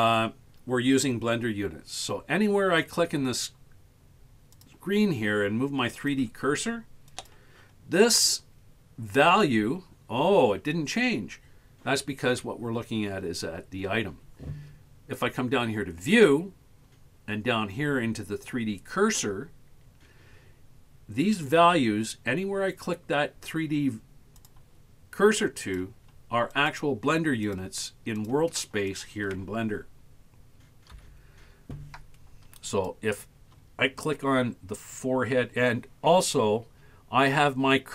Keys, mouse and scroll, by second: 2.2-2.5 scroll down 2, 2.5 scroll up 1, 4.6 click, 6.0 click, 7.1 click, 8.0 click, 16.2 click, 24.4 click, 25.7 click, 26.6 click, 27.5 click, 28.3 click, 29.0 click, 31.0 KP_1, 32.8 click.